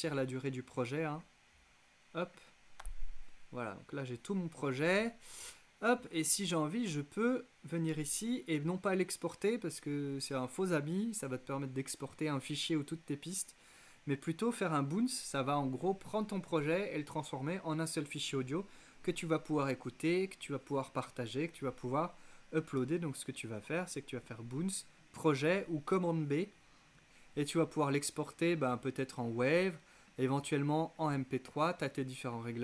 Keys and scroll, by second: 2.8 z.